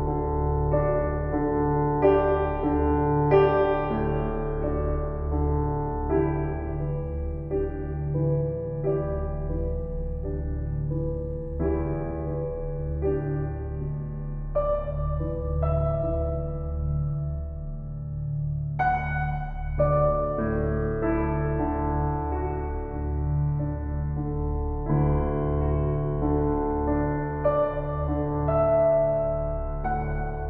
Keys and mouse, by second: 2.1 click, 6.8 click, 7.7 click, 8.0 alt+click, 9.0 click, 9.2 click, 9.7 click, 10.6 click, 12.8 ctrl+alt+click, 13.9 click, 15.0 s, 20.6 click, 21.4 ctrl+alt+click, 22.7 click, 24.9 click, 25.8 click, 27.9 click, 28.8 click, 29.8 click.